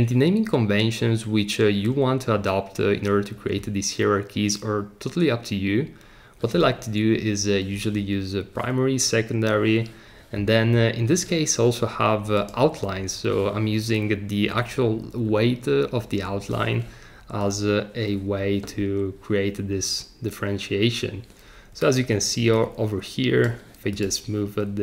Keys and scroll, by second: 9.7 Escape.